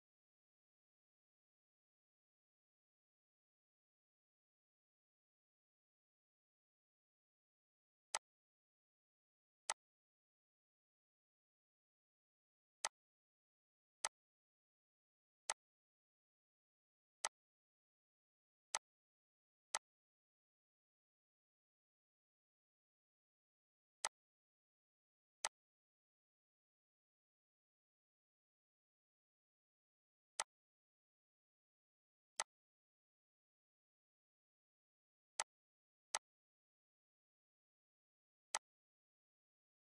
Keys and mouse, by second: 0.7 click, 1.9 click, 4.6 click, 5.5 click, 6.6 click, 8.1 click, 9.3 click, 13.7 click, 14.9 click, 19.0 click, 20.4 click, 23.1 click, 25.1 ctrl+d, 25.7 click, 28.6 click, 32.4 click, 34.1 click, 35.8 click, 37.2 click, 39.2 click.